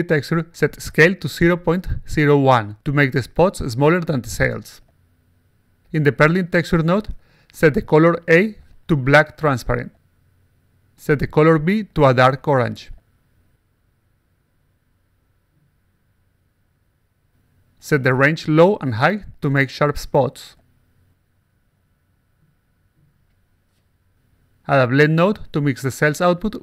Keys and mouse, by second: 0.8 click, 1.9 click, 2.4-5.0 typing, 6.1 click, 6.5 click, 6.6 click, 7.4 click, 8.4 click, 9.0-9.5 drag, 9.8 click, 11.6 click, 12.2-15.2 typing, 16.2 click, 18.6 click, 19.7 click, 21.6 click, 22.2 click, 22.8 click, 24.4 click, 24.9-26.1 drag, 26.5 click.